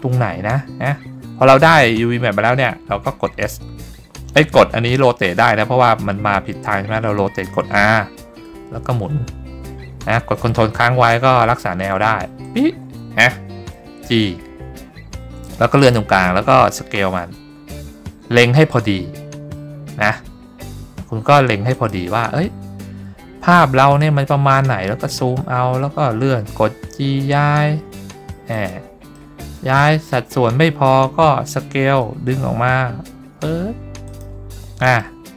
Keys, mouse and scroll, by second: 7.8 r, 12.5 ctrl+click, 14.2 g, 15.9 click, 17.0 s, 21.8 click, 22.9-23.8 scroll up 3, 24.1 scroll up 1, 24.8 middle click, 26.5 g, 28.6 click, 29.3 middle click, 29.9-30.3 middle drag, 32.0 s, 34.3 click, 35.1 shift+middle click.